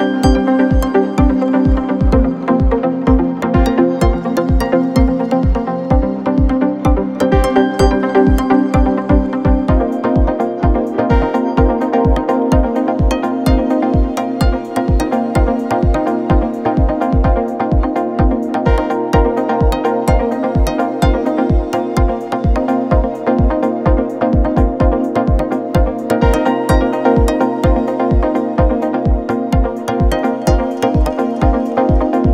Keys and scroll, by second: 3.0 3, 3.7 4, 8.3 3, 13.4 4, 17.6 ], 20.0 ], 22.5 ], 27.6 4.